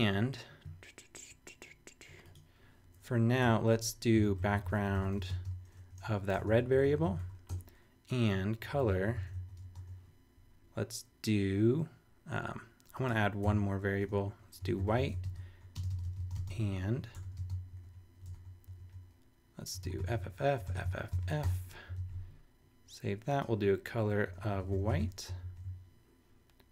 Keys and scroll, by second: 3.4 Return, 3.9-9.8 typing, 13.4 Return, 14.0-18.6 typing, 19.8 shift+f, 21.4 shift+;, 21.9 super+s, 24.0-25.5 typing.